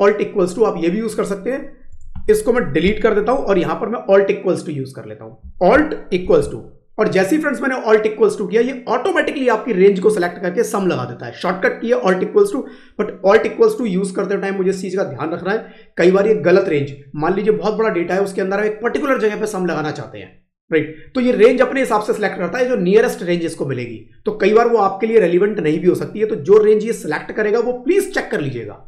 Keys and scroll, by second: 2.8 Delete, 6.1 alt+=.